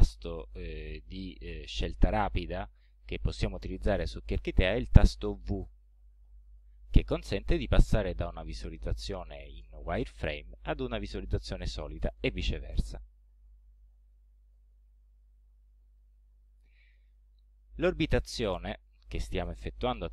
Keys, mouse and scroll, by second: 4.4-4.9 scroll down 2, 6.2 v, 7.3-9.3 drag, 13.3 v, 14.2-14.5 scroll down 2, 14.7-15.0 scroll up 1, 15.4-16.9 middle drag.